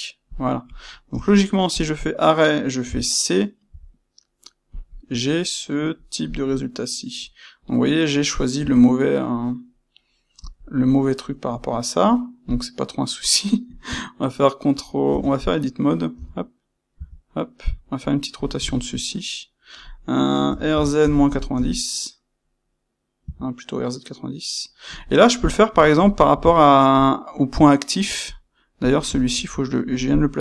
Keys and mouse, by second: 0.7 click, 1.0 space, 2.9 space, 10.7 middle click, 12.5 click, 15.0 Tab, 15.6 middle click, 16.1 a, 18.1 middle click, 20.4 f, 25.2-28.2 middle drag, 28.2 click, 28.5-30.4 middle drag.